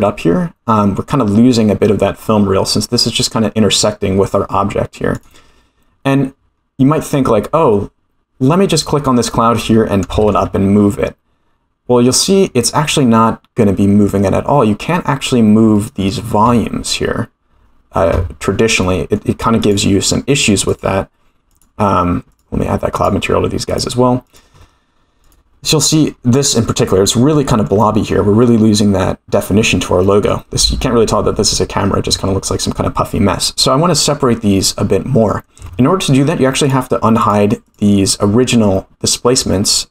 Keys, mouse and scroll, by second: 1.0 scroll up 2, 5.1 click, 5.8-6.4 scroll down 5, 8.7 click, 9.4-9.7 middle drag, 10.5 g, 18.8-19.2 middle drag, 19.6 click, 20.7 click, 21.5-22.5 drag, 22.9 click, 23.6 click, 25.2 click, 25.6-26.1 middle drag, 26.5 scroll up 4, 27.3 shift+middle drag, 27.8 scroll down 3, 30.0 middle click, 36.6 click, 37.2 click, 37.7-39.9 drag.